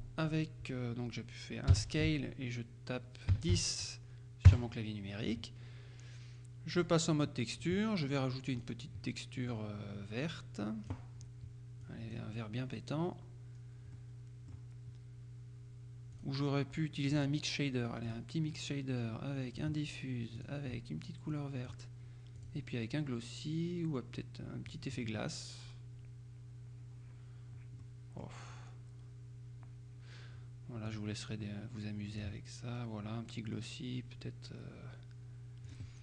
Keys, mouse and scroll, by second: 1.8 s, 3.4 KP_1, 3.6 KP_0, 4.6 KP_Enter, 6.9 click, 7.7 click, 8.6 click, 9.6-11.5 drag, 11.9 click, 13.6-14.0 scroll down 1, 14.0 middle click, 16.2 click, 17.2 click, 18.1 click, 19.6 click, 20.4 click, 21.4 click, 22.5 click, 24.7 click, 27.9 middle click, 31.0 click, 32.2 click, 32.7-33.2 scroll down 1, 35.7 click.